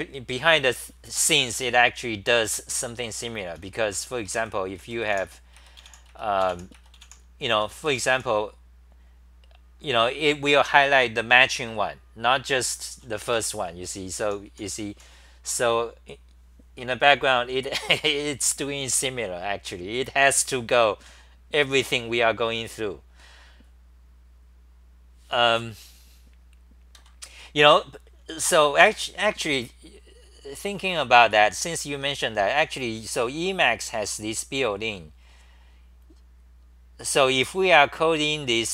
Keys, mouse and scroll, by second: 2.3-4.4 typing, 3.9 Return, 4.1 Return, 7.8 Home, 7.8 h, 7.9 h, 8.1 h, 13.1-15.4 typing, 27.0 ctrl+g, 28.9 ctrl+g.